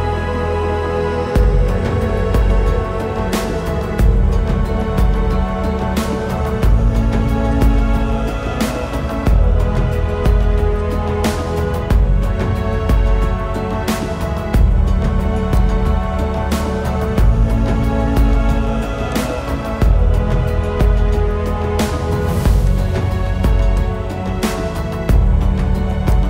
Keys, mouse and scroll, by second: 0.2 alt+scroll, 0.3 scroll up 1, 1.1 typing, 2.1-2.8 typing, 4.1-4.6 scroll up 1, 4.6 typing, 5.7 alt+scroll up 1, 6.5 ctrl+shift+s, 8.1-9.1 typing, 12.1-12.5 scroll up 1, 12.5 typing, 22.0 right click.